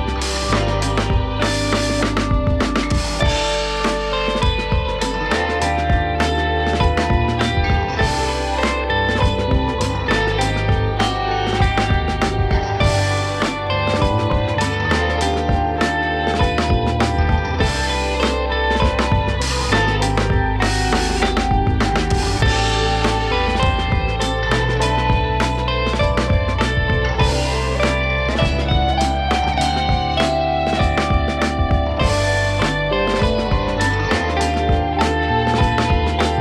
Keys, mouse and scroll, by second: 1.1 shift+x, 2.9 KP_3, 3.9 ctrl+r, 4.8 scroll up 1, 5.1 shift+middle click, 5.5 shift+z, 5.6 click, 6.4 g, 8.8 ctrl+r, 9.4 click, 10.1 g, 11.5 click, 11.8 g, 14.1 click, 14.4 g, 15.2 click, 15.4 g, 16.7 KP_1, 17.3 shift+middle click, 17.6 shift+x, 18.4 click, 18.8 shift+z, 19.0 click, 20.0 g, 23.7 s, 24.9 e, 27.9 g, 29.9 click, 31.0 g, 32.3-33.7 shift+middle drag, 33.7 KP_1, 34.3 shift+z, 34.9 click, 35.9 KP_3.